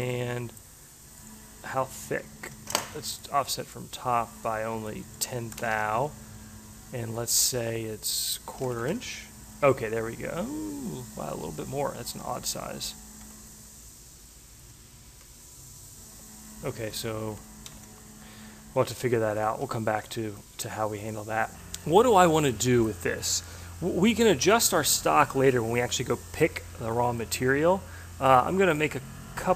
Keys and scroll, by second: 5.1 1, 5.7 Tab, 8.4-9.3 typing, 12.2 shift+Left, 13.2 9, 14.4 shift+Left, 15.0 6, 16.3 shift+Left, 17.3 3, 17.7 5, 19.0 shift+Left, 19.6 3, 20.0 Tab.